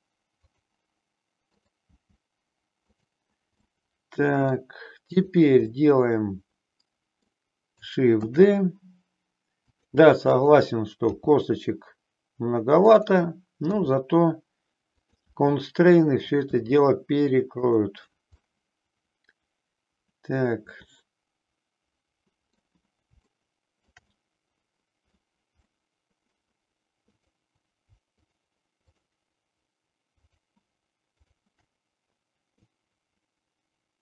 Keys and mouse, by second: 0.4 click, 1.6 click, 2.0 g, 2.8 click, 3.6 middle click, 5.1 click, 5.8-7.3 middle drag, 8.2 shift+d, 9.7 click, 11.1 g, 12.8 click, 15.2 e, 18.4-22.7 middle drag, 23.2 shift+middle click, 24.2-25.2 middle drag, 25.6 middle click, 27.1 click, 28.1 shift+click, 28.8 shift+click, 30.1 shift+click, 31.1 shift+click, 32.6-34.0 drag.